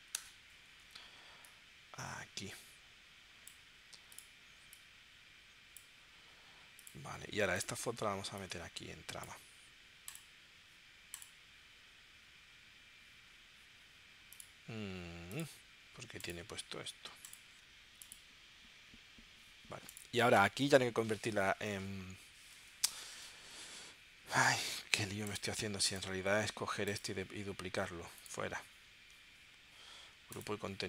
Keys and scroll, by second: 0.2 Return.